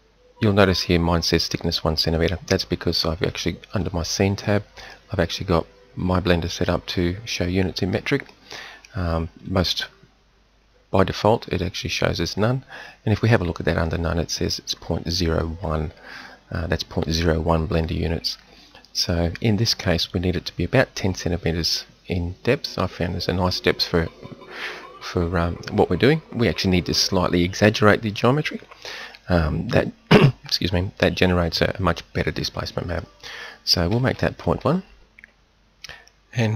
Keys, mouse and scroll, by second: 3.7-36.2 drag.